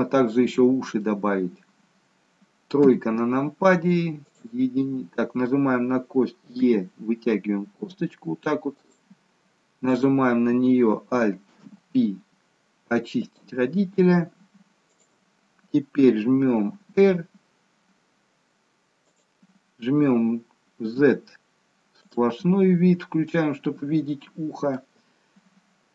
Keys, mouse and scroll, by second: 1.0 middle click, 2.8 KP_3, 4.3 click, 6.6 e, 9.9 click, 11.9 alt+p, 16.7 r, 20.7 z, 23.2 middle click.